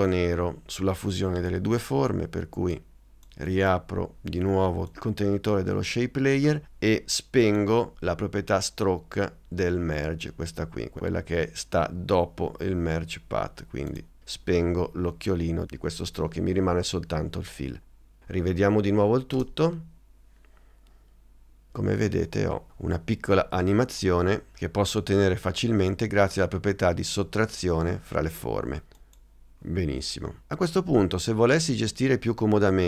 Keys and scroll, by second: 19.5 space.